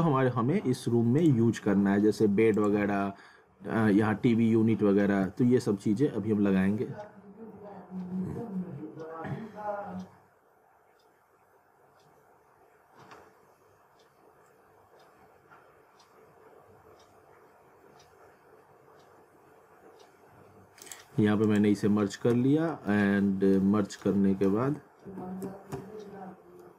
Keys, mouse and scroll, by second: 1.2 click, 20.9 click, 22.3 z, 22.9 alt+middle click, 23.6 scroll down 1, 24.0 alt+middle click, 24.7 alt+w, 25.4 typing, 26.2 scroll down 1, 26.6 middle click.